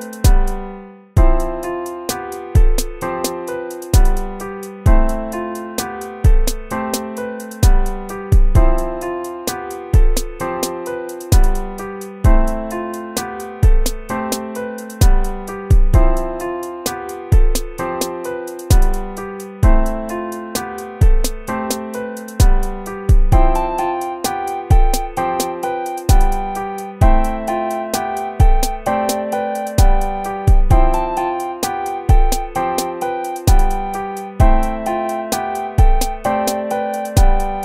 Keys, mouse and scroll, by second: 7.4 ctrl+-, 17.6 ctrl+-, 28.9 ctrl++, 29.4 ctrl+-, 30.8 ctrl++, 35.6 ctrl+-.